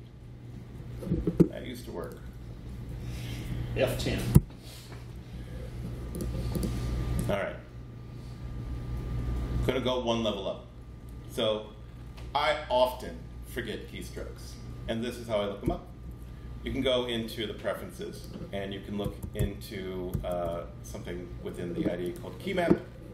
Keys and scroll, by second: 4.2 ctrl+shift+p, 15.5 super+,, 18.7-20.8 typing.